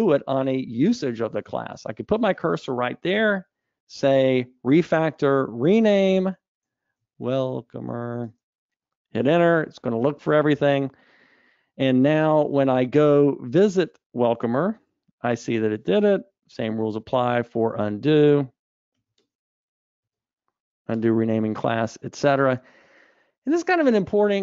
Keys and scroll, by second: 4.3 ctrl+alt+t, 15.2 super+b, 16.6 super+e, 20.4 super+z.